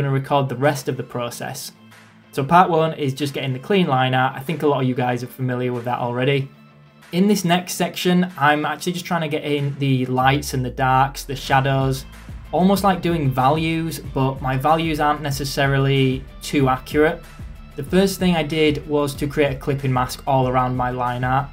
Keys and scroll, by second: 3.9 [, 16.6 ctrl+z, 19.0 ctrl+z, 20.2 ctrl+z, 21.2 ctrl+z.